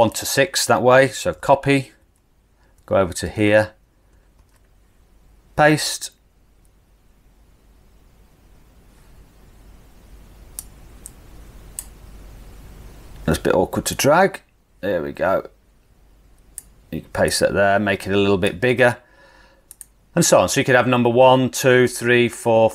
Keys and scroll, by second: 1.4 super+c, 2.9 super+c, 4.4 super+v.